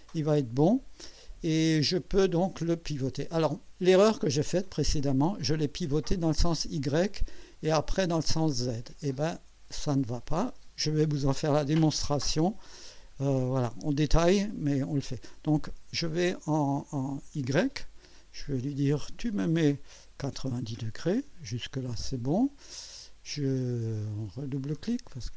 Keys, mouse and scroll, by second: 2.2-3.3 drag, 18.7 click, 20.3 KP_9, 20.5 KP_0, 24.5 click.